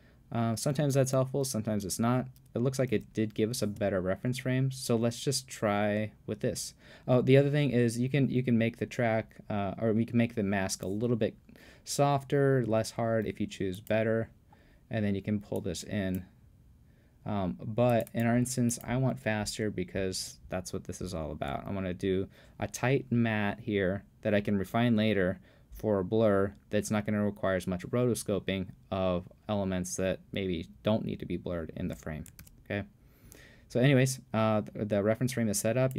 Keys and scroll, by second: 32.4 super+f.